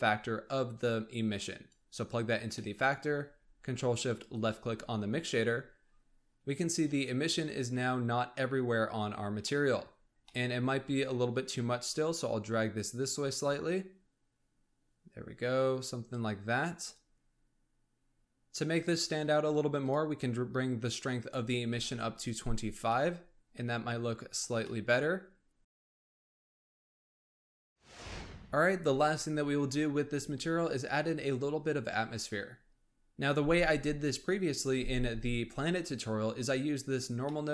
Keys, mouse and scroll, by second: 2.5-4.0 middle drag, 4.0 ctrl+shift+click, 5.7-6.2 scroll up 2, 6.2-7.4 scroll down 1, 9.4 middle click, 10.0 scroll up 1, 10.2-10.6 middle drag, 10.6-11.9 scroll up 1, 11.9 click, 16.8-18.2 drag, 19.8-22.3 drag, 22.8-24.4 middle drag, 24.4 scroll down 1, 24.6-25.8 middle drag, 36.8 scroll down 1, 37.1 scroll up 1, 37.2 middle click.